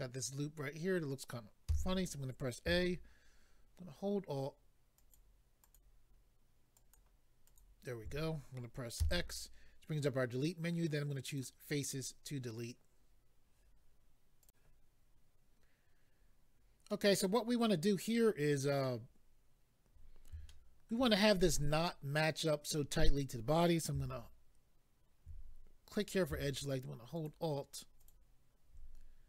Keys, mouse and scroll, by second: 1.7 a, 5.0 alt+click, 5.6 alt+click, 6.7 alt+click, 7.4 alt+click, 9.0 x, 11.3 click, 14.5 click, 16.1-16.9 scroll down 2, 16.9 middle click, 16.9-17.8 scroll down 3, 18.0 middle click, 20.4 shift+middle click, 22.4-23.6 scroll up 2, 26.0 click, 27.1 alt+click, 27.2 alt+click, 28.0 alt+click, 28.1 alt+click.